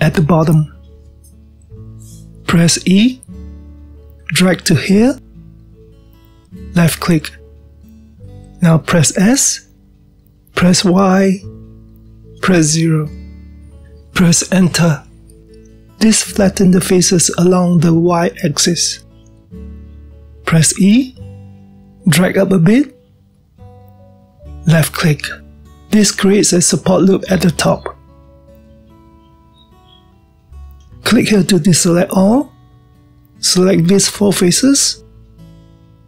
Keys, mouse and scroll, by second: 0.2-2.9 ctrl+middle drag, 2.9-4.2 scroll down 1, 4.2 e, 8.7-10.3 middle drag, 10.3 s, 17.0-20.0 middle drag, 21.2-22.6 middle drag, 22.6 e, 26.3-26.6 scroll down 1, 26.6-32.8 middle drag, 32.8 click, 33.7-34.5 middle drag, 34.5 drag, 35.8-36.0 middle drag.